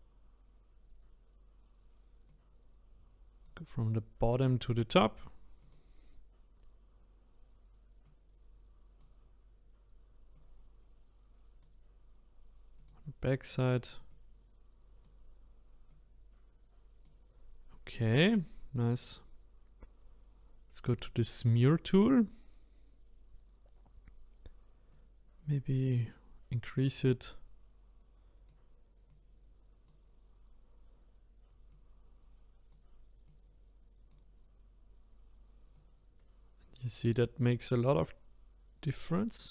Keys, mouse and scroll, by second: 2.3-5.4 drag, 5.6 click, 8.0-12.9 drag, 14.1-18.8 drag, 20.9 click, 21.4 scroll up 2, 22.3 scroll up 1, 24.9-39.5 drag.